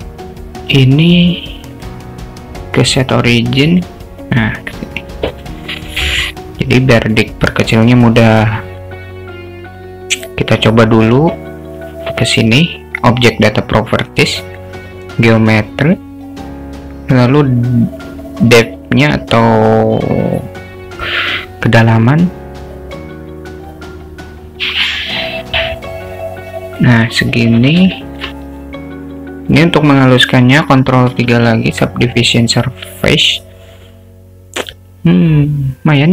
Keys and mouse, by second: 2.0-3.9 drag, 5.4 s, 8.2-9.4 drag, 12.9 click, 15.4 click, 21.9-26.9 drag, 28.0 alt+shift+middle drag, 31.0 ctrl+3, 32.8 click, 33.9-36.1 alt+middle drag.